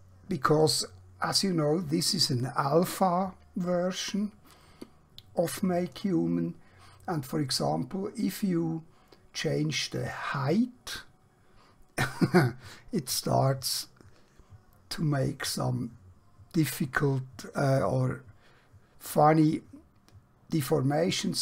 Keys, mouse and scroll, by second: 9.7-21.4 drag.